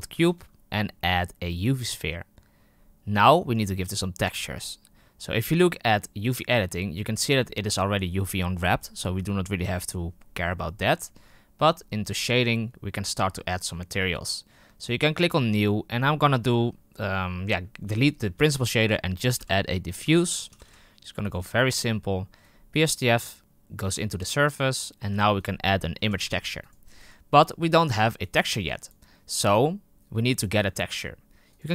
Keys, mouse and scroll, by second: 0.2 shift+a, 6.2 click, 12.0 click, 14.8-15.5 drag, 17.9 Delete, 23.4 click, 24.4-31.6 drag.